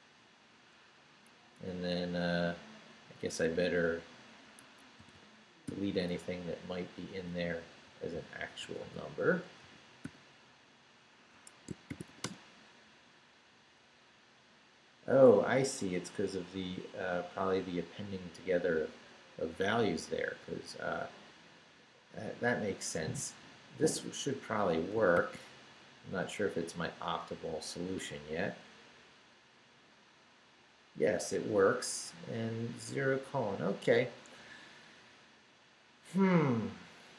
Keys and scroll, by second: 1.3 Down, 3.0 Up, 4.6 Escape, 5.0 y, 6.1 Right, 7.4 Right, 7.8 x, 9.6 i, 10.0 0, 11.3 Escape, 11.6-12.6 typing, 25.1 shift+;, 25.8 shift+Up, 27.9 Return.